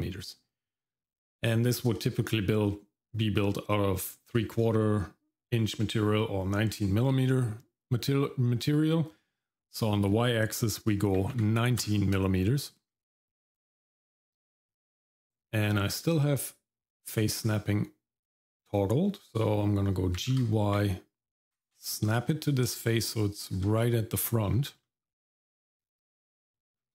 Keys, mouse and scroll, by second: 9.7-11.8 drag, 17.4-17.9 scroll up 2, 20.2 g, 22.3-23.5 shift+middle drag, 24.4-24.8 scroll up 2, 24.8 middle click, 26.1 shift+middle click, 26.7-26.9 scroll down 1.